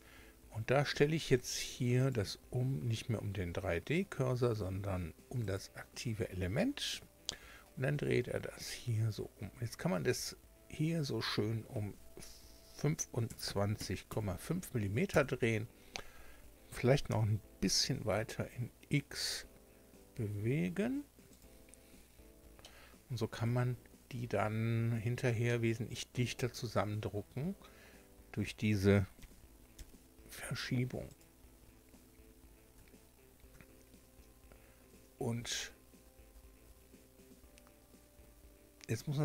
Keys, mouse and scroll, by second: 2.0 click, 5.4 click, 7.1 r, 13.3 KP_2, 13.5 KP_5, 14.1 KP_Decimal, 14.1 KP_5, 15.1 KP_Enter, 17.1 g, 17.8 x, 21.3 click, 21.9 scroll down 1, 22.6-23.6 shift+middle drag, 24.3-24.9 scroll up 2, 25.4 shift+click, 26.1 shift+scroll down 2, 26.9-27.3 scroll up 2, 29.2 g, 31.1 click, 31.5 scroll down 2, 32.7 Tab, 33.5 Tab.